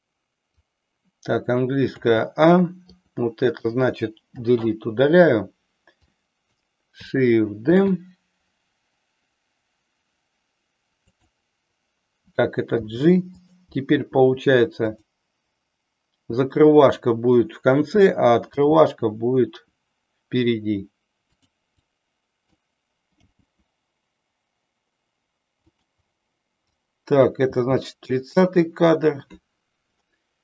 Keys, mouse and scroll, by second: 1.8 a, 2.8-3.7 drag, 4.2 Delete, 6.1-6.6 drag, 7.7 shift+d, 11.1 click, 12.8 g, 15.0 click, 16.8-17.4 drag, 18.3 g, 21.3 click, 21.8-22.4 drag, 23.2 g, 25.7 click, 26.7-27.2 drag, 27.5 g.